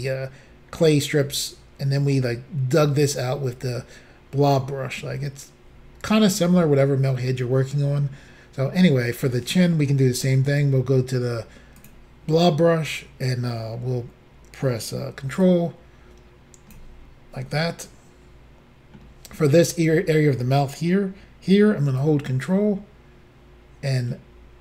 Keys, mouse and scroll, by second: 8.8 middle click, 11.8 click, 13.2 click, 15.4 ctrl+click, 17.4 middle click, 22.0 ctrl+click.